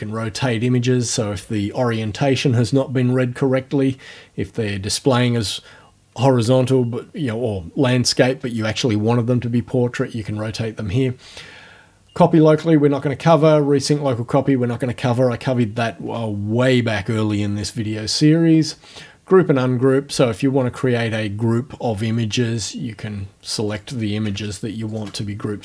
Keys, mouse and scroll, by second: 20.6 click, 23.7 click, 24.9 shift+click.